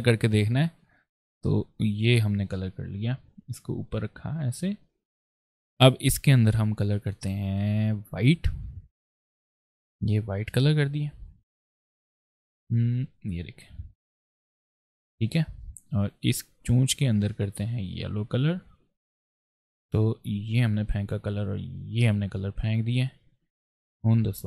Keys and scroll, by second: 0.4 shift+g.